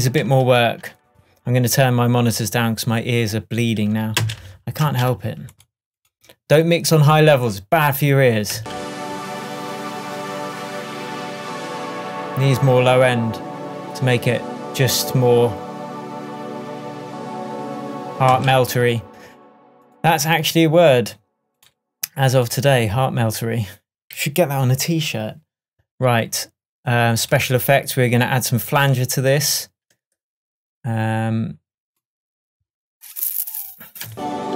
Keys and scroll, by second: 4.3 space, 8.6 space, 18.4 space, 34.1 space.